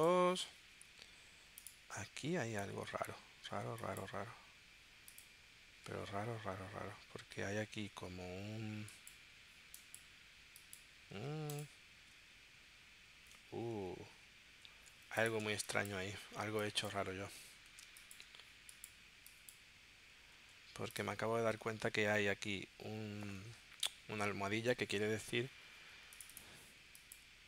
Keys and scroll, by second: 5.8 super+z, 15.5 space, 16.4 space, 17.8 space, 20.3 super+z.